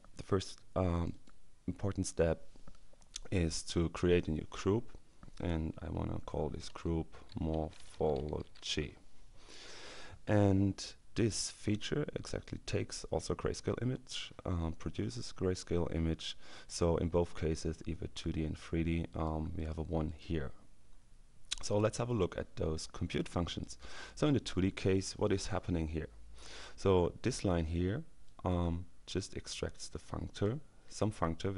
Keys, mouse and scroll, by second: 6.6-9.0 typing, 11.3 click, 19.1 click, 20.9-21.3 scroll down 2, 23.2-24.3 drag, 28.3-30.1 drag.